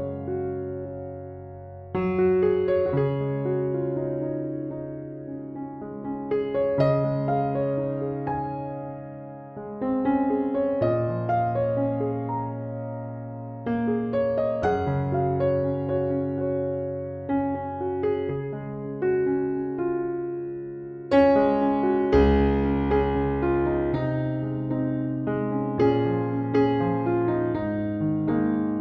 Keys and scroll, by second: 24.5 ctrl+8.